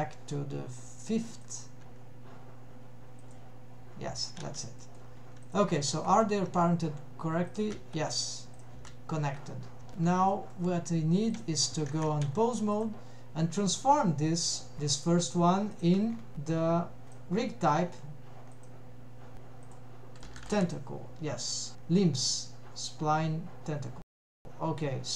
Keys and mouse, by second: 3.3 click, 4.4 alt+a, 4.8 middle click, 5.5 click, 5.8 g, 7.6 click, 7.8 g, 8.9 g, 9.9 middle click, 10.2 n, 10.4 middle click, 11.3 click, 11.9 ctrl+Tab, 12.8 click, 15.8 drag, 17.2 click, 18.6-19.9 drag, 20.2-21.8 drag, 20.2 BackSpace.